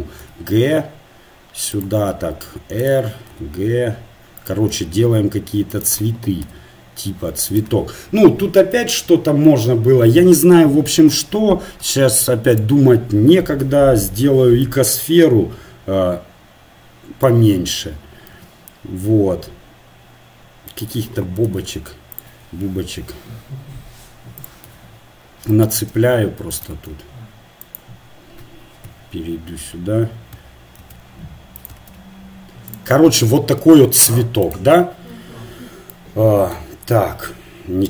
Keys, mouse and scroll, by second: 0.4 g, 2.1 r, 3.3 g, 5.2 s, 6.5 g, 12.6 shift+a, 14.8-16.3 drag, 18.3 s, 21.4 g, 23.1 s, 24.7 g, 26.0 shift+d, 26.8-29.2 drag, 26.8 shift+d, 29.2 KP_3, 30.8 shift+d, 31.8 shift+d, 34.4 right click, 37.1 Tab.